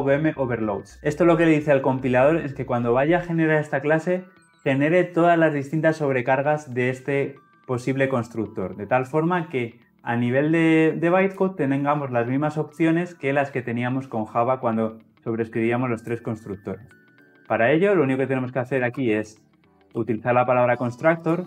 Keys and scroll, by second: 19.9 Tab.